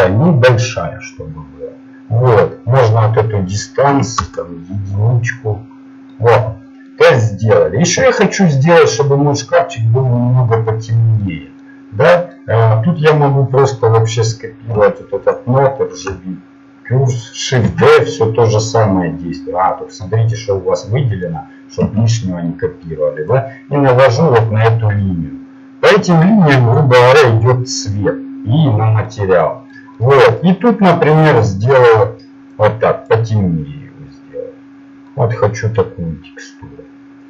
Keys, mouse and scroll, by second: 2.8-5.5 drag, 6.2-8.4 middle drag, 15.4-18.0 drag, 18.0 shift+d, 20.9-22.0 drag, 21.8 Delete, 23.3-24.6 drag, 30.8-32.3 drag, 33.2 click.